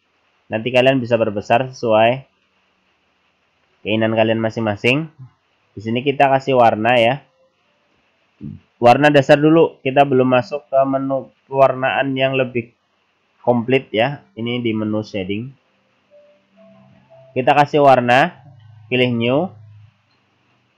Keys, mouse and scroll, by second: 10.0 click, 18.3 click.